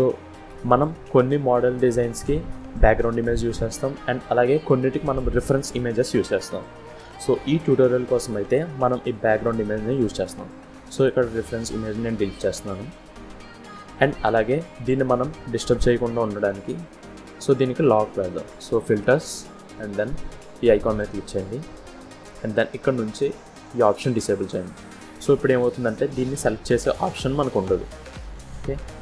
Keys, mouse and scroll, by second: 0.3 KP_1, 1.3-2.1 scroll up 4, 2.4 click, 4.9 click, 9.0 click, 10.8 click, 12.7 Delete, 14.1 click, 18.4 click, 21.7 click, 23.5 click, 25.1 click, 26.0 click, 26.5-27.1 scroll up 5, 27.1-27.4 scroll down 2, 27.7 click, 28.0 click, 28.8 scroll down 1.